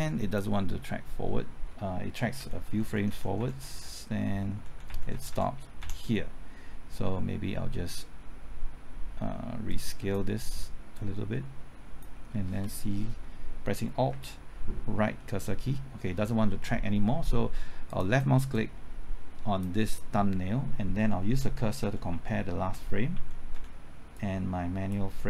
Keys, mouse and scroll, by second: 0.0 click, 2.4 Left, 2.5-3.4 typing, 9.7-12.0 drag, 14.1 typing, 15.0 alt+Right, 17.9-20.0 drag, 21.3 Left, 21.8-23.5 typing, 24.1 click, 25.2 typing.